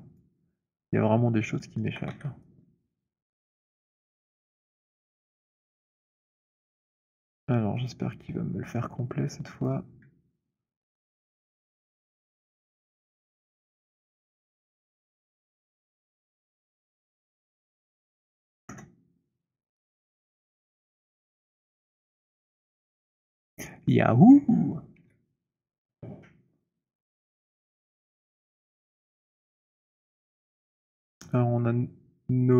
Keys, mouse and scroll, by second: 0.8 alt+middle click, 1.4 alt+scroll, 1.9 alt+middle click, 1.9 w, 3.1 right click, 3.5 click, 3.9 click, 4.3 Delete, 6.3 click, 7.9 click, 9.6 click, 11.0 alt+middle click, 12.1 click, 12.8 alt+middle click, 15.2 click, 16.3 alt+click, 17.9 click, 18.6 Return, 20.1 click, 21.4 click, 22.4-23.1 scroll, 24.0 alt+click, 24.6 w, 29.0 right click, 30.5 alt+click, 31.1-32.2 scroll, 32.4 click.